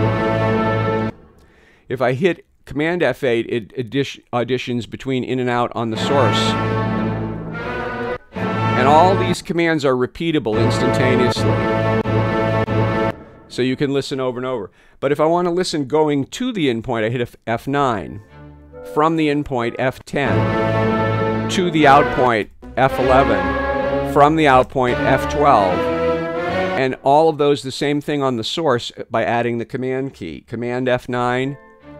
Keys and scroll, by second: 1.0 space, 2.2 space, 5.6 super+F8, 8.1 super+F8, 9.3 space, 10.4 F8, 11.3 F8, 11.9 F8, 12.5 F8, 13.0 space, 17.8 F9, 20.2 F10, 22.5 F11, 24.7 F12, 26.7 space, 31.2 super+F9.